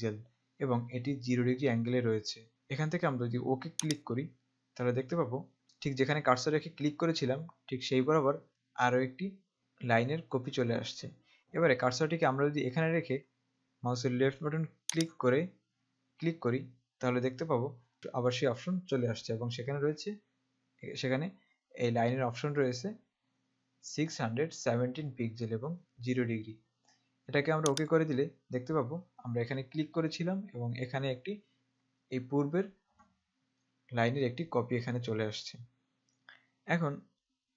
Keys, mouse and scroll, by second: 4.1 click, 15.2 click, 27.8 click.